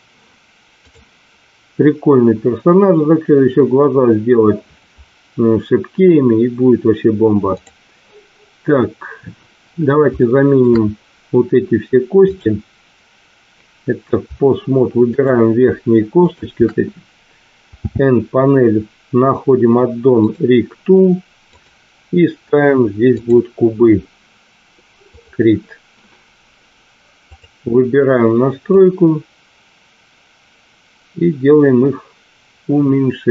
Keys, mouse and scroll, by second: 0.7 click, 10.2 shift+middle click, 15.0 shift+click, 16.2 shift+click, 17.7 n, 20.2 click, 21.6-23.3 drag, 25.1 click, 27.3 click, 28.6-33.3 drag.